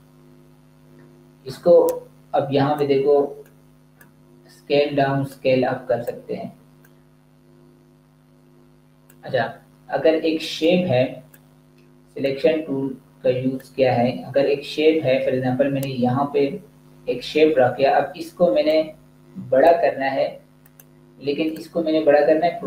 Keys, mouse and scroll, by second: 18.6 click.